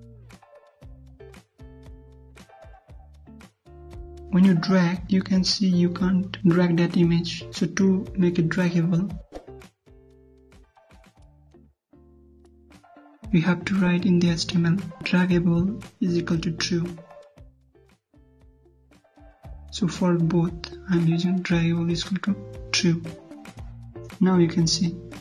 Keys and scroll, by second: 3.6 alt+Tab, 4.7 alt+Tab, 10.1 alt+Tab, 20.6 ctrl+shift+Left, 20.8 ctrl+c, 23.2 ctrl+v, 23.9 ctrl+s, 24.1 ctrl+F5.